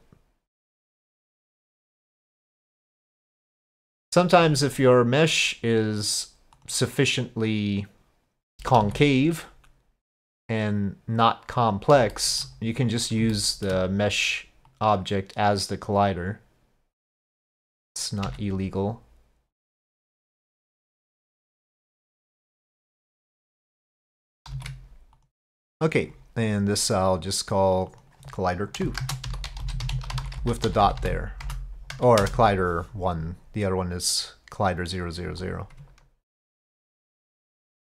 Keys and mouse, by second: 0.7-3.6 drag, 5.4-6.1 drag, 6.6 click, 7.6-8.6 drag, 8.9 s, 12.2 shift+middle click, 13.4 shift+middle click, 14.7-17.6 drag, 18.3 s, 21.8-23.0 drag, 24.6 ctrl+a, 27.8 click, 28.9-33.0 shift+drag, 29.6 l, 30.8 0, 31.0 0.